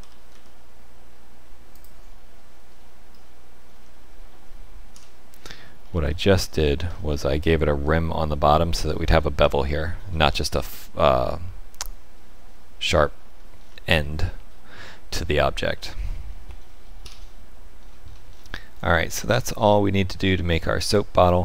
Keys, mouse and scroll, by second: 0.0 e, 2.7-3.1 scroll down 2, 3.1 middle click, 3.7 Tab, 4.9 KP_Divide, 5.9 middle click, 6.8-7.4 scroll up 5, 7.4 shift+middle click, 13.2-15.6 scroll down 5, 14.0 middle click, 17.8-18.8 scroll down 8, 18.8 middle click, 20.0 KP_Divide.